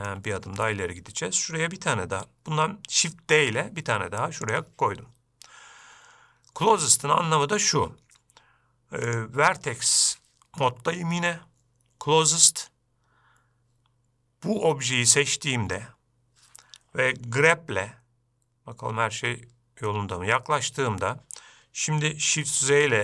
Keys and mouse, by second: 0.2-0.5 shift+middle drag, 3.8 shift+d, 9.5-14.3 drag, 19.5 g.